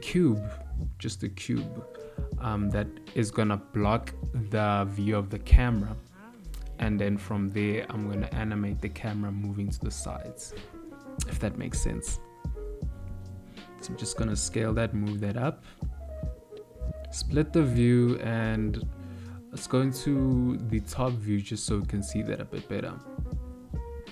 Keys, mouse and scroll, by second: 0.1 shift+s, 2.9 shift+a, 6.3 s, 9.0 s, 12.5 click, 16.8 click, 17.4 click, 18.6 click, 19.0 click, 21.3 KP_7, 22.8 ctrl+middle click.